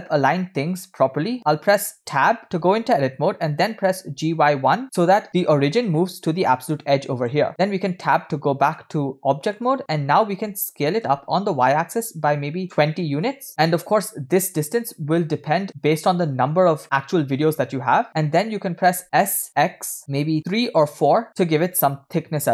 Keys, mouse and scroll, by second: 0.1 shift+middle click, 5.5 scroll up 3, 8.8-9.7 middle drag, 9.7-10.0 scroll down 3, 13.5-14.1 shift+middle drag, 15.3 scroll down 1.